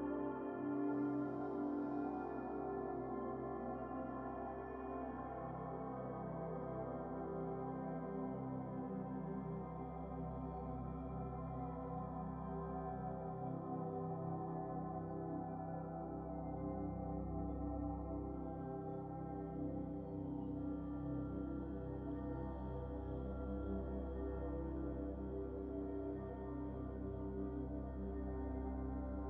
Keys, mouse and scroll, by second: 0.2-2.1 scroll down 2, 2.1-3.8 shift+middle drag, 4.6 shift+a, 16.7-17.0 scroll up 3, 17.2-19.2 drag, 21.4-22.8 scroll down 1, 22.8-24.4 middle drag, 24.6 scroll down 2, 24.9-26.5 middle drag.